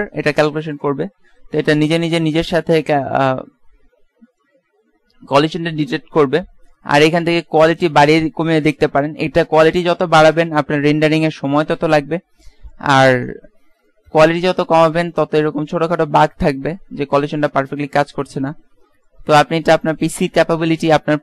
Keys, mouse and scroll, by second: 1.5-2.6 middle drag, 14.9 middle click, 15.5 middle click, 16.5 middle click.